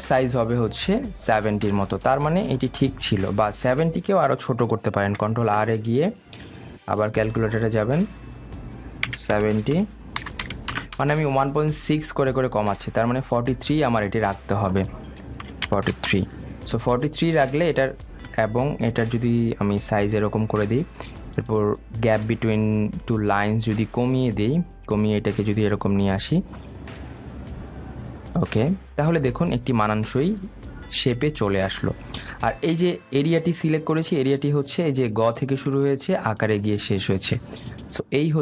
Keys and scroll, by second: 6.3 super+r, 12.2 Return.